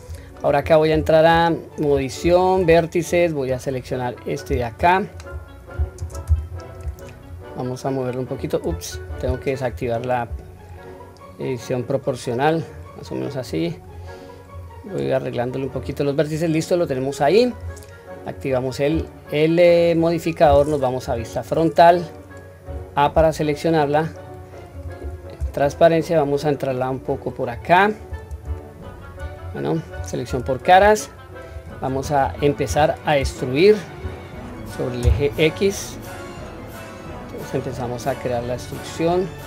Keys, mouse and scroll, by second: 0.1-0.9 scroll up 2, 0.9 Tab, 2.2 1, 3.1-3.5 drag, 4.6-5.1 shift+middle drag, 6.0 shift+space, 7.3 click, 7.6 click, 8.9 ctrl+z, 9.6 o, 10.6 click, 10.9-12.7 drag, 13.5 click, 14.5-15.7 drag, 16.3-16.8 scroll down 1, 16.8 middle click, 18.4 click, 18.9-19.9 scroll down 2, 21.0 KP_1, 22.6 a, 25.0 q, 25.7-27.1 drag, 27.5-28.1 scroll up 1, 28.6-29.1 shift+middle drag, 28.6 scroll up 2, 29.4-30.3 scroll up 1, 30.3 3.